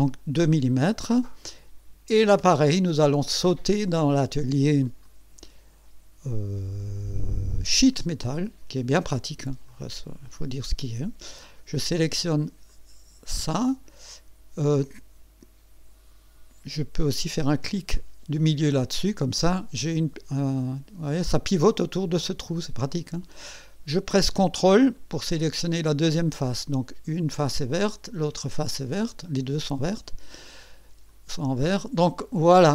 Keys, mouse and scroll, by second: 0.7-1.0 scroll up 1, 1.4 right click, 5.0 click, 7.8 click, 9.7 click, 12.7 click, 17.6 middle click, 19.4-23.6 drag, 25.7 ctrl+click, 26.4 ctrl+click, 26.6 ctrl+click, 27.8-29.5 drag, 31.1 click.